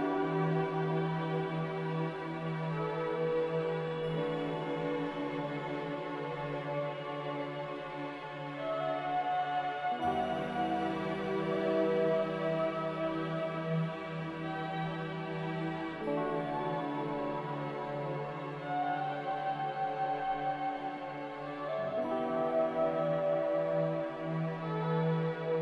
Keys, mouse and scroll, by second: 5.1 z, 9.8-10.7 typing, 12.8 q, 19.1 z, 20.8 Return, 23.4-24.2 typing, 23.6 Return.